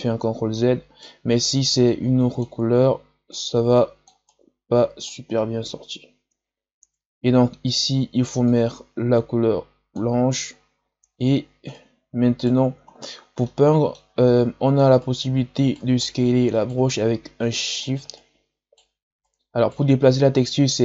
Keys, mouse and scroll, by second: 0.5-1.8 right drag, 1.8-4.2 drag, 4.2-6.7 right drag, 6.7 ctrl+z, 8.4-11.6 drag, 11.6-12.9 right drag, 12.9-13.4 scroll down 1, 13.4 middle click, 14.2-14.9 scroll up 1, 14.9-20.8 right drag.